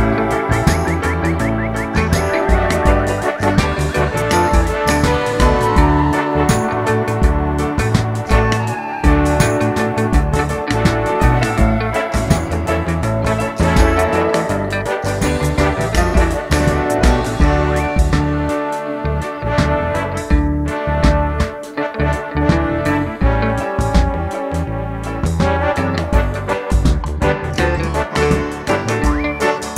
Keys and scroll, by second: 2.0 d, 18.7 1, 18.9 Return.